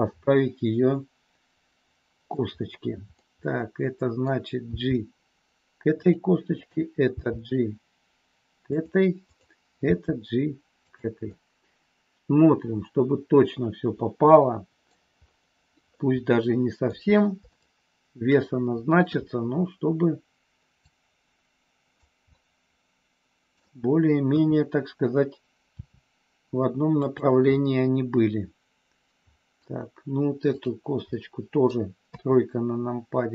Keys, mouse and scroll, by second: 3.1 scroll up 1, 3.2-4.2 middle drag, 4.6 g, 6.0 click, 6.5 click, 7.1 g, 8.6 click, 9.2 click, 9.9 g, 10.9 click, 11.2-14.9 middle drag, 16.0 scroll up 1, 16.1 middle click, 17.5-19.0 shift+middle drag, 20.9-22.0 drag, 22.2 scroll up 1, 22.3-23.5 middle drag, 24.2 KP_3, 25.7 r, 27.1 click, 27.5-29.6 middle drag, 31.1 middle click, 32.1 KP_3.